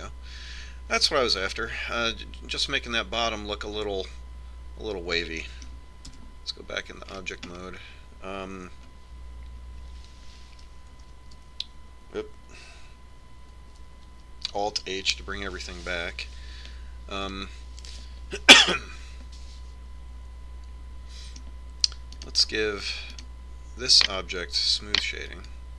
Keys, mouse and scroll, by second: 1.1-2.9 middle drag, 7.8 Tab, 8.8-11.1 middle drag, 12.7 shift+h, 15.8 alt+h, 19.1-20.8 middle drag, 23.9-25.7 right drag.